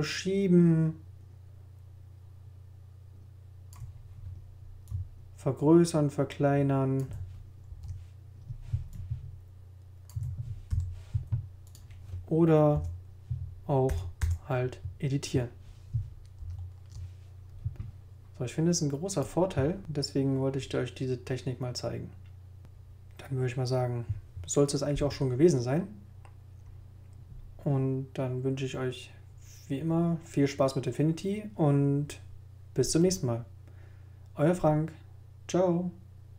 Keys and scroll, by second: 7.7 shift+super+z, 8.2 super+z, 10.7 shift+t, 11.3 t, 12.7 BackSpace, 13.9 BackSpace, 16.4 super+z.